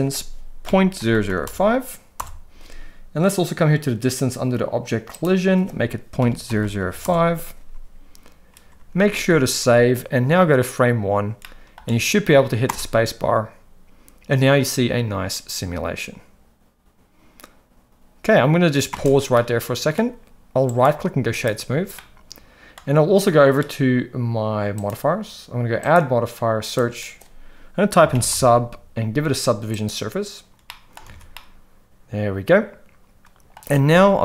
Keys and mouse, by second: 1.1 0, 5.2-7.0 drag, 6.6 0, 9.0 ctrl+s, 9.2 ctrl+s, 9.4 ctrl+s, 11.4 middle click, 12.7 space, 19.1 space, 19.3-19.9 middle drag, 20.7-21.5 right drag, 21.9-22.7 middle drag, 25.9-30.0 drag, 30.6-30.9 middle drag, 31.0 alt+a, 31.3-33.5 middle drag, 33.8 space.